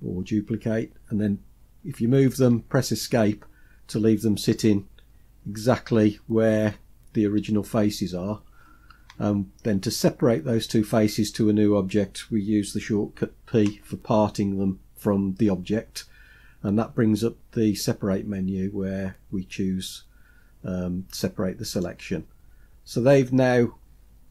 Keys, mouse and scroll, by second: 13.6 p, 23.9-24.3 scroll down 2.